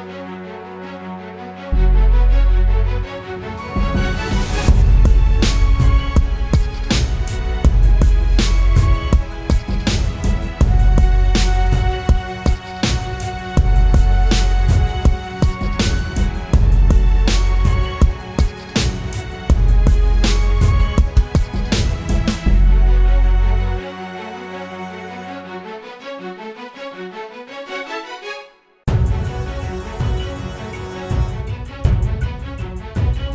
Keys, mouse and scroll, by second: 16.7 double click, 30.1 ctrl+t, 31.1 alt+shift+click.